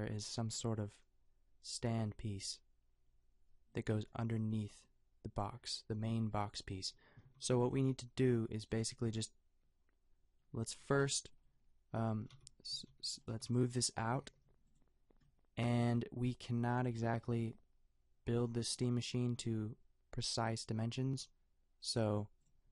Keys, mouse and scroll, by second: 6.1 g, 7.2 a, 7.8 g, 12.4 Tab, 12.7-14.3 typing, 17.0 g, 19.2 a.